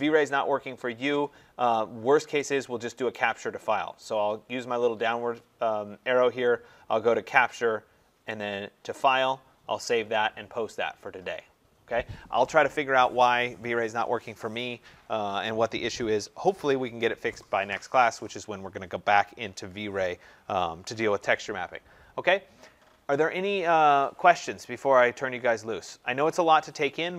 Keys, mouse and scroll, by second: 3.0 click.